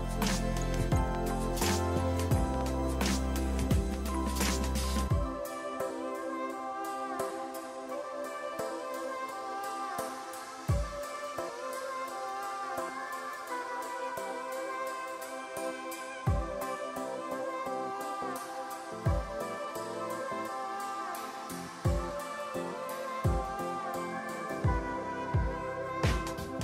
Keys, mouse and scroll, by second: 0.1 space, 1.9 click, 4.1 click, 4.6 click, 5.2 click, 6.1 space, 8.1 click, 9.1 space, 9.2 space, 10.9 click, 13.8 space, 16.2 click, 19.0 click, 20.0 shift+click, 24.2 click, 25.2 click.